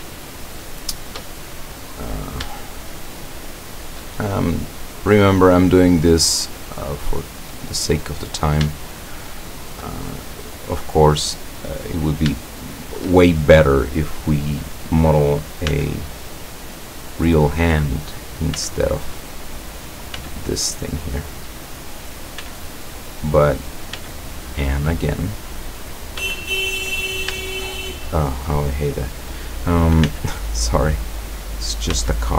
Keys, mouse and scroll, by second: 0.0 middle click, 0.1 shift+scroll up 1, 0.2-1.3 shift+middle drag, 1.5-2.4 shift+middle drag, 2.6-3.6 shift+middle drag, 3.7 shift+middle click, 4.2-4.9 shift+scroll up 1, 5.1 scroll up 1, 5.5-5.8 scroll down 1, 6.2-7.7 middle drag, 8.2 middle click, 9.0-9.7 shift+middle drag, 10.3 middle click, 11.0 middle click, 11.3 scroll down 2, 11.8-13.2 middle drag, 14.6 right click, 15.8 x, 16.2 click, 17.0 right click, 18.2 right click, 18.6 x, 19.0 click, 19.8 right click, 20.2 x, 20.8 click, 22.0 right click, 22.4 x, 22.8 click, 23.6 right click, 24.0 x, 24.4 click, 25.3 right click, 25.8 right click, 26.2 x, 26.6 click, 27.6-28.6 shift+middle drag, 29.2 right click, 30.1 x, 30.5 click, 31.5 right click, 32.0 x.